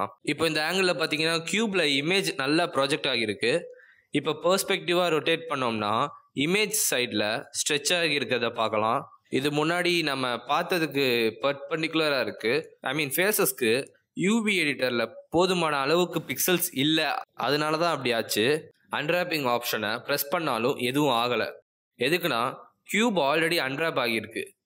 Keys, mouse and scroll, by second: 3.8 middle click, 5.3 shift+middle click, 6.0 middle click, 10.4-11.4 scroll up 7, 11.4 middle click, 11.4 scroll down 1, 11.6 scroll up 2, 11.8 middle click, 12.8 middle click, 16.2-17.5 scroll down 8, 17.5 middle click, 17.5-18.5 scroll down 1, 20.0 click, 24.4 click.